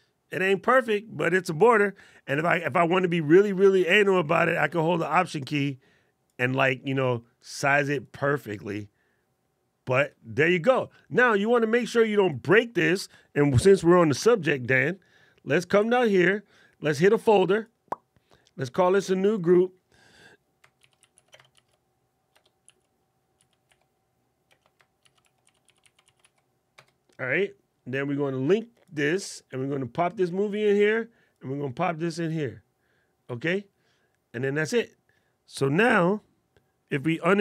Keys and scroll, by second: 15.6 alt+super+8.